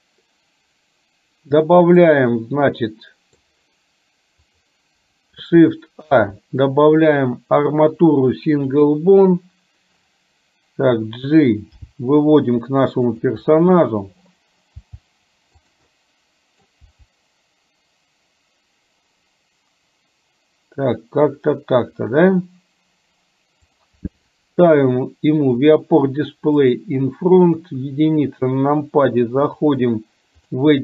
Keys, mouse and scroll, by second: 2.1-3.6 middle drag, 4.7 click, 6.2 shift+a, 11.9 g, 16.1 middle click, 16.8 g, 24.7 click, 25.7 click, 26.7 click, 27.7 KP_1, 29.6-30.7 drag.